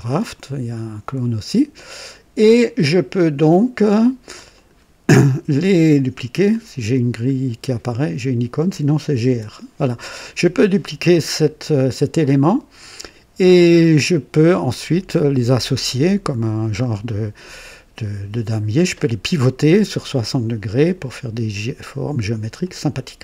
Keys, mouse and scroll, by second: 1.7 click, 4.5 click, 8.8-9.7 typing, 12.2 click, 15.9-16.8 drag, 17.0 click, 17.6-19.1 drag, 22.6 click.